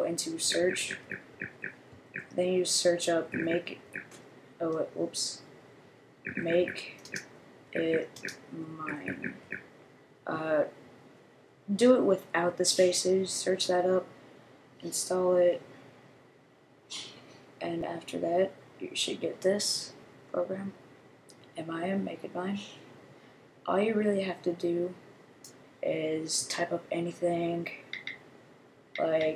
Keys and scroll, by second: 0.0-4.3 typing, 5.9-9.9 typing.